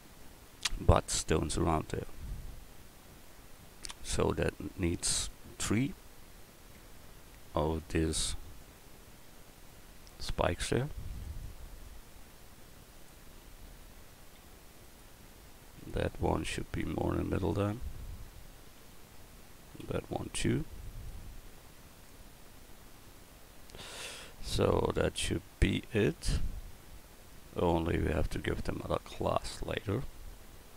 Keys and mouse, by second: 6.8 Tab, 7.5 Tab, 7.8 right click, 8.0 Tab, 9.6 l, 11.1 shift+d, 11.8-14.1 drag, 14.8 right click, 15.8 l, 16.5-18.8 drag, 18.8 a, 19.8 l, 21.1 click, 29.1 Tab.